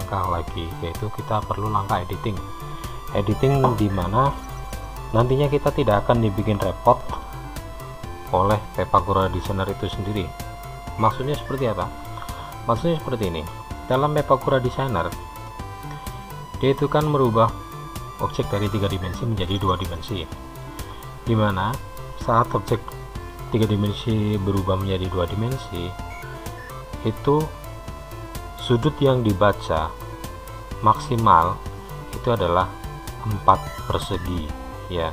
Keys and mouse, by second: 15.6-21.0 middle drag.